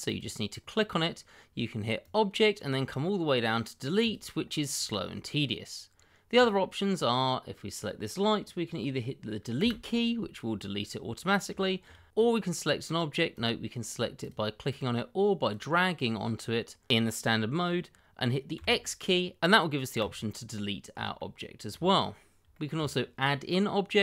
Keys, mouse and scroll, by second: 0.6-0.9 scroll up 1, 2.0 click, 4.7 scroll down 1, 6.3 click, 9.6 Delete, 11.6 shift+middle click, 11.7 middle click, 11.7 shift+middle click, 12.1 click, 14.8 double click, 16.2-16.9 scroll up 1, 18.5 x, 20.0 click, 21.1 shift+middle click, 21.2 middle click, 21.3 shift+middle click, 21.9-22.4 scroll up 1, 22.5 shift+middle click, 22.6 middle click, 22.7 shift+middle click.